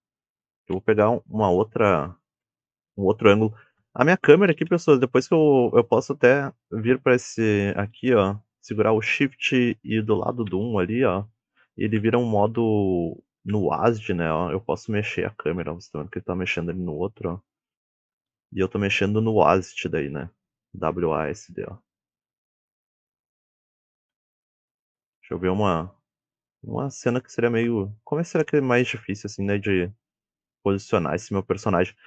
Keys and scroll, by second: 3.0 KP_7, 4.6 KP_1, 10.9-15.6 typing, 18.2 w, 22.2 s, 24.4 w, 25.3 a, 26.1 d, 31.3 a.